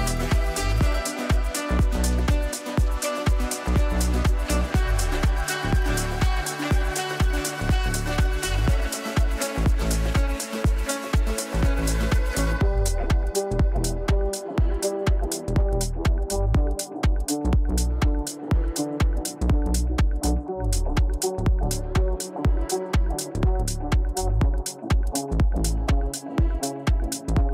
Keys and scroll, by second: 2.6 ctrl+z, 9.9 Delete.